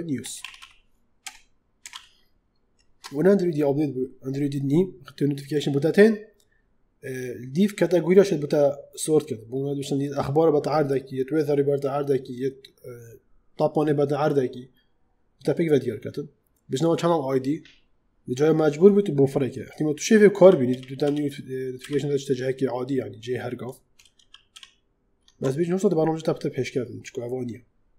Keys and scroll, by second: 0.3 w, 0.4 a, 1.1 BackSpace, 1.8 s, 20.2 ctrl+z, 24.0 ctrl+shift+z.